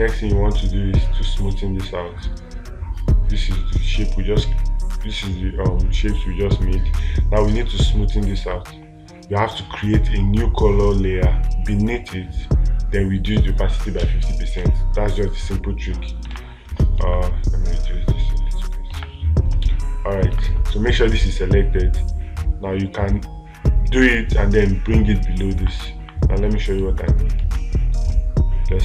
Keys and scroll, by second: 27.9 space.